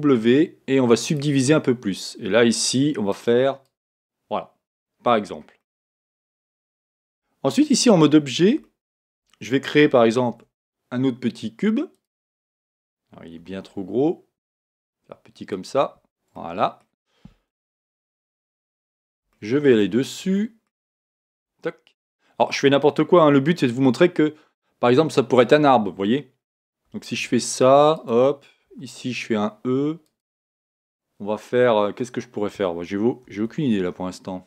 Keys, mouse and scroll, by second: 0.0 w, 3.1 click, 4.8-7.2 middle drag, 5.1-5.6 scroll down 1, 7.0 Tab, 7.3 middle click, 8.6-10.6 middle drag, 10.3 shift+a, 13.4 s, 14.3 s, 16.3-21.3 middle drag, 21.3 Tab, 22.0-23.7 right drag, 23.7 e, 26.9 e, 28.1 click, 28.7 e, 30.2 click, 33.2 e.